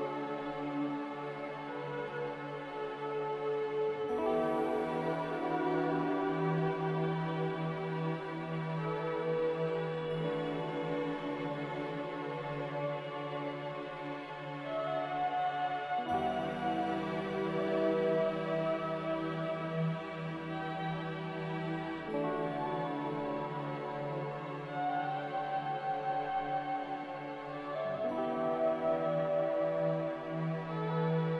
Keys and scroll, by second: 2.7 typing, 5.0-5.8 typing, 9.4 z, 11.1-11.9 typing, 13.6 ctrl+z, 16.8 Return, 20.2 z, 23.3-24.2 typing, 27.6-28.5 typing, 29.8 z.